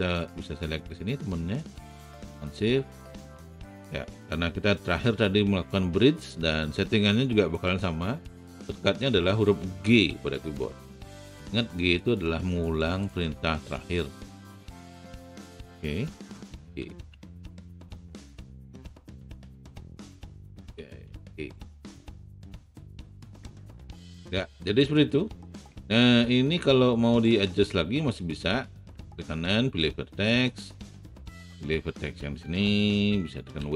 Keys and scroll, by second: 10.1 g, 16.6 g, 17.3 alt+g, 20.5 shift+g, 21.3 alt+shift+g.